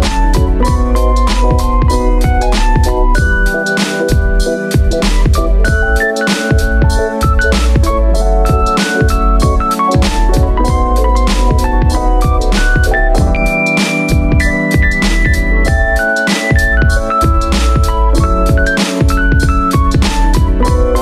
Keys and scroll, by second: 6.3 space, 8.1 super+z, 8.3 space.